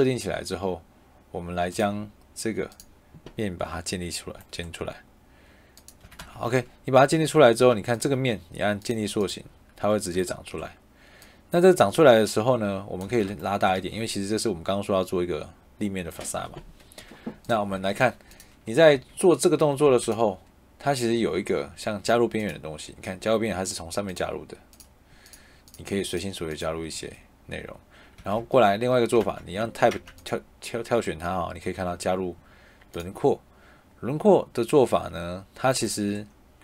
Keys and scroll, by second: 5.9 Escape, 7.0 Tab, 13.0 Escape, 13.7 Escape, 16.7 Escape, 18.8 Escape, 19.7 Tab, 26.8 Escape, 28.1 Escape, 29.1 Tab.